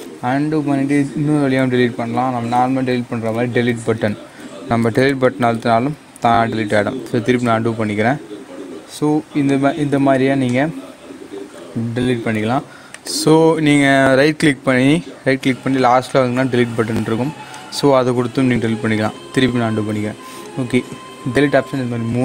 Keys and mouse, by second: 6.9 ctrl+z, 9.4 click, 12.8 right click, 17.4 click, 19.7 ctrl+z.